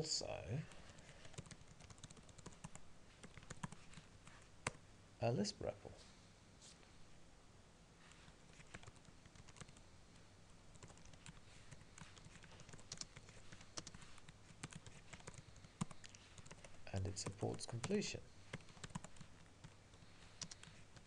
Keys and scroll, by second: 2.7 Tab, 4.8 Return, 15.8 Tab.